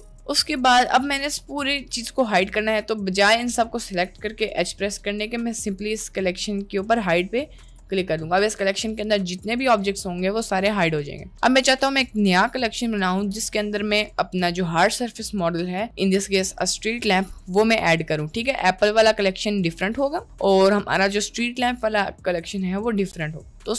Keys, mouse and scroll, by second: 1.2-3.4 drag, 4.1-8.0 drag.